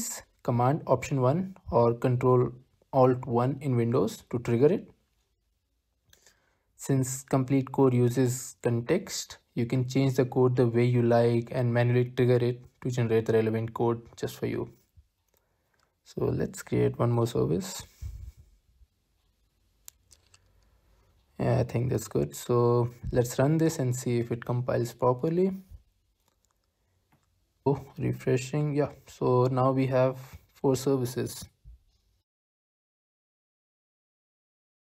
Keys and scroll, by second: 1.0 alt+super+1, 4.0 Return, 4.4 Return, 5.3 alt+super+1, 8.0 Return, 8.2 Return, 9.3 alt+super+1, 13.5 Return, 14.7 alt+super+1, 17.8 Return, 18.2 Return, 19.2 alt+super+1, 24.9 Up, 25.6 Return.